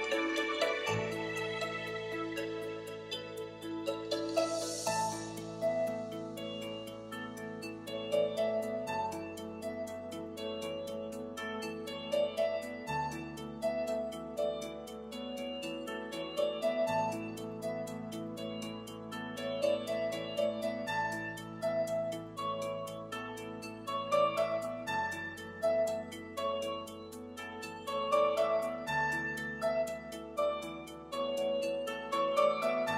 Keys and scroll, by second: 21.2 super+s.